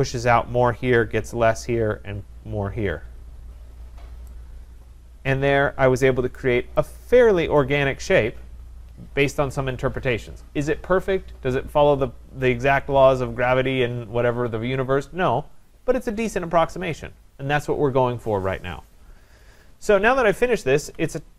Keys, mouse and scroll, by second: 2.4-3.2 scroll, 3.7-4.3 scroll, 4.3 scroll, 6.7 right click, 7.1-7.4 scroll, 8.1 right click, 20.0-21.3 scroll.